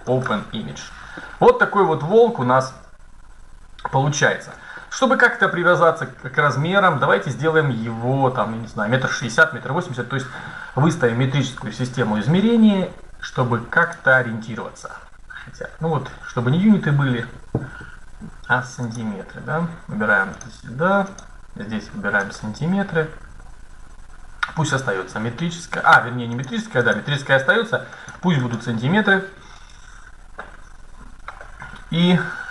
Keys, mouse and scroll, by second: 0.0-1.7 drag, 1.9-3.1 middle drag, 3.8 middle click, 4.7-6.1 middle drag, 13.5-15.3 drag, 18.6-22.7 drag, 26.0-29.5 drag, 30.6 middle click, 31.4-32.0 scroll up 1.